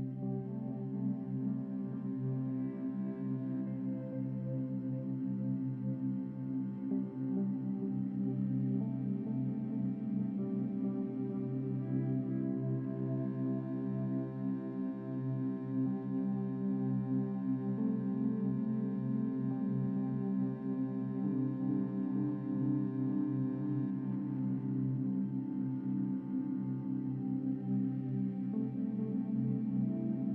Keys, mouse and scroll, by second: 1.4-2.5 drag, 3.1-4.9 drag, 5.9-6.6 scroll up 9, 6.6 Tab, 7.2 a, 7.4 a, 8.5-9.2 scroll down 5, 9.2 scroll down 3, 9.9-11.2 right drag, 11.2 u, 12.8-13.3 scroll up 8, 13.3-13.8 scroll down 9, 14.0 a, 15.0 s, 18.3 right click, 18.8 Tab.